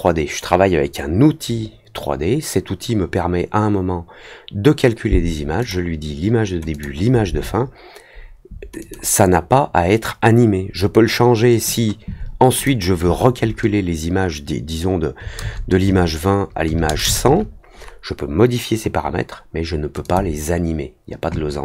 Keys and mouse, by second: 5.5 click, 6.7 click, 8.7 click, 12.5 click, 20.0 click.